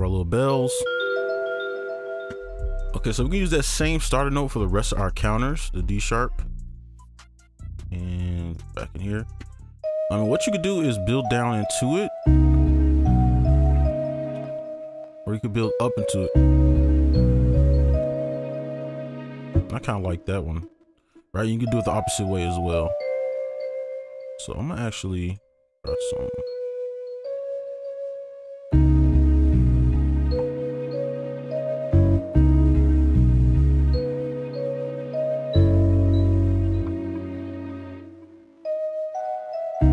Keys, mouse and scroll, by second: 0.7 double click, 2.3 right click, 8.6 right click, 10.3 double click, 12.3 space, 14.4 space, 14.5 space, 16.3 double click, 17.4 space, 19.5 space, 20.7 ctrl+click, 21.1 right click, 22.2 double click, 22.2 right click, 23.0 double click, 23.4 right click, 23.8 ctrl+click, 27.2 double click, 32.1 space, 32.7 space, 37.9 space, 39.1 double click.